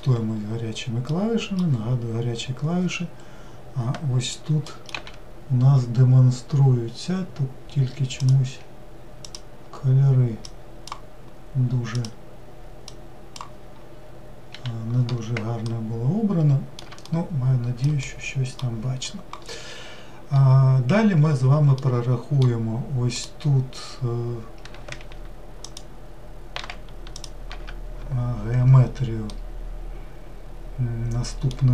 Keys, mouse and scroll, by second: 15.7-21.1 middle drag, 21.8-23.1 middle drag, 23.1 click, 25.7-27.2 ctrl+shift+drag, 29.3-31.7 middle drag.